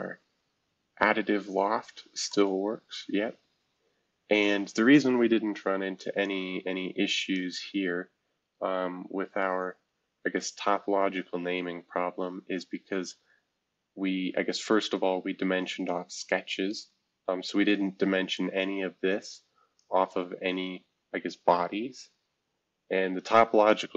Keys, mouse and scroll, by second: 3.1 scroll up 2, 5.9 F2, 6.2-7.4 drag, 9.1 shift+F2, 9.7-10.7 shift+scroll down 3, 10.2 F2, 11.2-11.8 scroll down 1, 11.9 scroll down 1, 12.5 scroll down 2, 12.9 scroll up 1, 13.5 scroll up 1, 16.2 F2, 16.9 F2, 18.0 F2, 18.3-20.1 drag, 20.1 F2, 20.8 shift+F2.